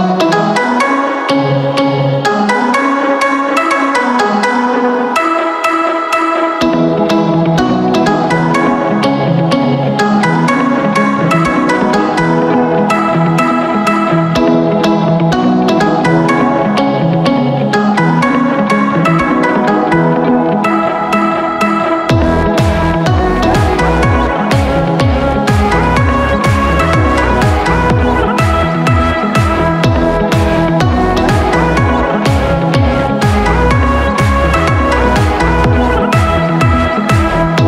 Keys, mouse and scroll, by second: 10.7 click, 20.7 click.